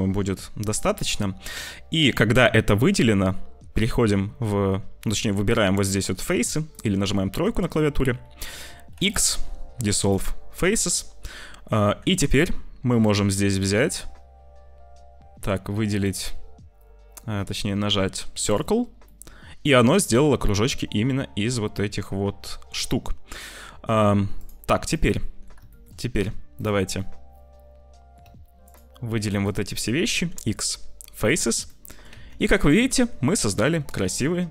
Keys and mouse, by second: 1.4-3.2 middle drag, 5.9 click, 6.7 click, 7.5 click, 8.8 x, 10.7 click, 11.8 ctrl+s, 19.0 click, 19.7-22.3 middle drag, 24.2 middle click, 25.0 middle click, 25.6 shift+middle click, 27.0-28.1 drag, 29.7 click, 30.0 x, 31.5 click, 32.1 Tab, 32.4 click, 33.2 click, 34.1 middle click.